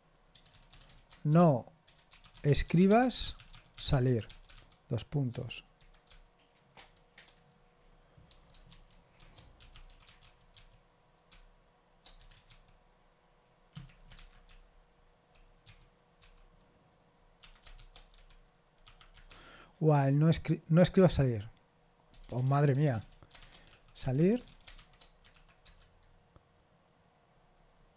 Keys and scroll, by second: 0.5-5.0 typing, 5.7 Delete, 6.7 shift+0, 9.1-11.0 typing, 12.3 BackSpace, 12.4 r, 14.1-16.7 typing, 17.7-18.1 typing, 22.4-25.3 typing, 25.6 Return.